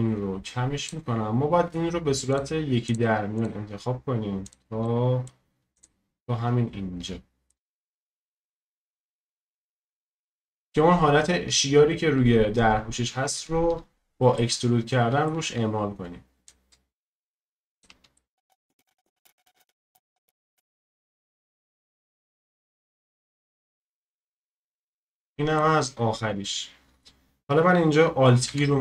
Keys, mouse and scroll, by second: 4.8-5.7 middle drag, 5.7-7.2 shift+drag, 7.2-7.7 scroll down 1, 7.7 middle click, 8.2-8.7 scroll up 1, 8.7-9.1 scroll down 1, 9.1-12.3 shift+middle drag, 13.9-14.3 scroll up 1, 14.3-16.5 shift+middle drag, 16.5-18.1 shift+drag, 18.1 middle click, 18.4 scroll down 2, 18.5 shift+middle click, 18.6 scroll up 1, 18.7 shift+click, 18.8 scroll down 1, 18.8 middle click, 18.9 shift+click, 19.4 shift+middle click, 19.6 shift+click, 20.0 middle click, 20.1 ctrl+shift+click, 20.4 shift+middle click, 20.7 click, 20.9 shift+middle click, 21.0 shift+click, 21.3 ctrl+click, 21.4 middle click, 21.5 ctrl+click, 21.6 middle click, 21.8 ctrl+shift+click, 22.1 middle click, 22.2 shift+click, 22.3 middle click, 22.4 shift+click, 22.5 middle click, 22.6 shift+click, 22.7 middle click, 22.8 shift+click, 22.9 middle click, 23.0 shift+click, 23.1 middle click, 23.2 shift+click, 23.3 scroll down 1, 23.4 middle click, 23.4 scroll up 1, 23.5 shift+click, 23.6 middle click, 23.9-25.3 shift+drag, 25.3 middle click, 25.8-26.5 scroll down 1, 26.5-28.5 scroll up 1, 28.5 alt+e.